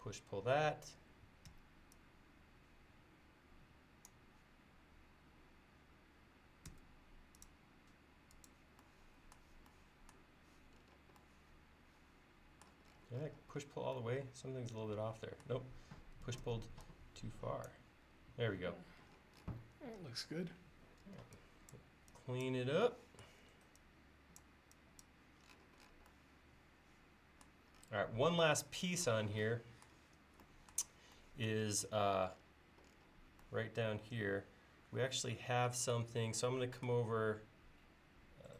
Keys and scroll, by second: 1.5 p, 6.7 l, 16.5 p, 21.1 e.